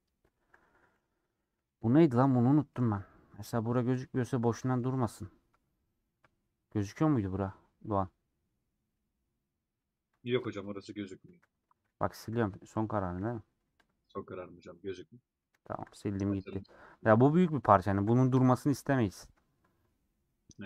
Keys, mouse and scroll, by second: 0.1 shift+click, 1.6 ;, 2.1 scroll down 1, 2.4 middle click, 2.8-3.1 scroll down 5, 3.1 scroll up 1, 3.2-3.9 scroll down 4, 3.9 middle click, 4.5-7.0 scroll up 9, 7.6-11.3 middle drag, 11.3 3, 14.3-16.3 middle drag, 16.3 scroll up 2, 16.4 scroll down 1, 16.5 scroll up 1, 16.5 middle click, 16.8 scroll down 1, 17.3 ctrl+z, 18.7-19.3 scroll down 7, 19.3-20.5 shift+middle drag, 20.5 scroll up 1.